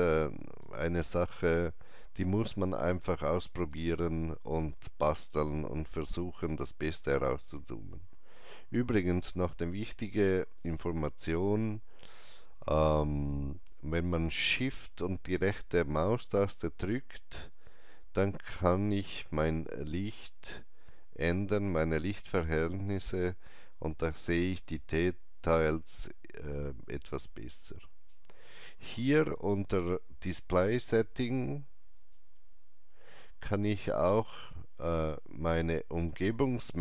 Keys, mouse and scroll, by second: 1.4 alt+middle click, 4.3 right click, 4.6 alt+right click, 5.9 alt+middle click, 16.3 alt+middle click, 16.3 alt+right click, 31.9 click, 31.9 shift+right click, 31.9 alt+middle click.